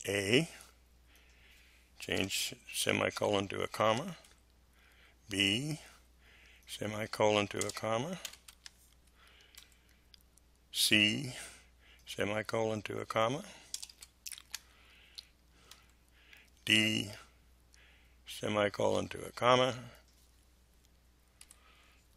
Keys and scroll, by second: 2.1 BackSpace, 3.1 ,, 3.7 space, 4.2 Delete, 7.5 BackSpace, 8.2 ,, 8.4 space, 9.5 Delete, 13.7 BackSpace, 13.9 ,, 14.3 space, 15.6 Delete, 21.4 Delete.